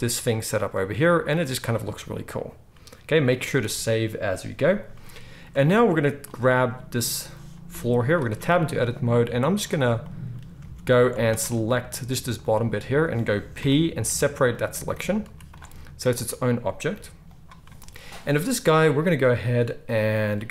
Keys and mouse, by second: 0.7-6.3 middle drag, 3.3 ctrl+s, 3.5 ctrl+s, 6.3-8.2 right drag, 7.7 g, 8.2-9.6 middle drag, 8.3 Tab, 9.6-11.3 drag, 10.7 alt+a, 11.3-16.0 alt+shift+middle drag, 12.1 z, 13.5 p, 14.9 Tab, 15.2 z, 16.0 click, 16.2-20.5 middle drag, 16.8 g.